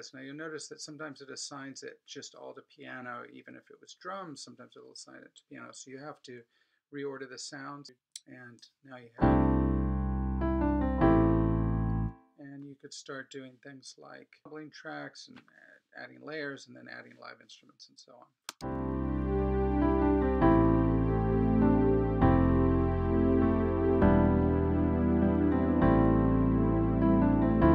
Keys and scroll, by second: 9.0 space, 11.9 space.